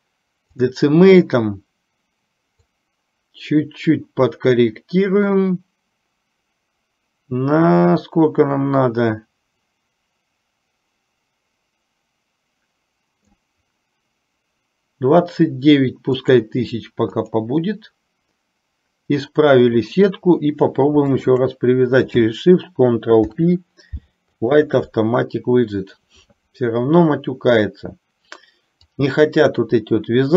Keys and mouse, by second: 2.8-15.5 drag, 16.5-18.6 drag, 21.3 shift+click, 23.3 ctrl+p.